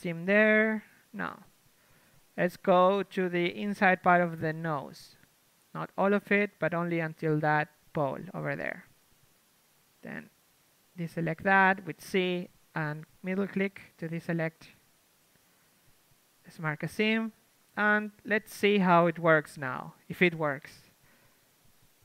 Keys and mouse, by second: 0.0 z, 0.8 c, 1.7-4.5 drag, 1.8 z, 4.2 KP_3, 4.5 z, 5.2 c, 7.4 z, 11.1 c, 13.2-15.3 right drag, 15.3-16.7 middle drag, 16.7 ctrl+e, 17.7 a, 18.2 ctrl+Tab, 19.5 l, 20.5 shift+space, 21.8 u.